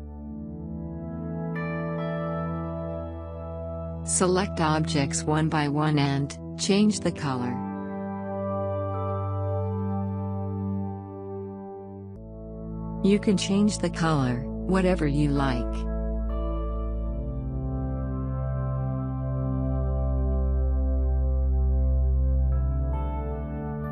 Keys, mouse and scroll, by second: 3.7 shift+click, 17.8 click, 20.2 right click, 22.2 click.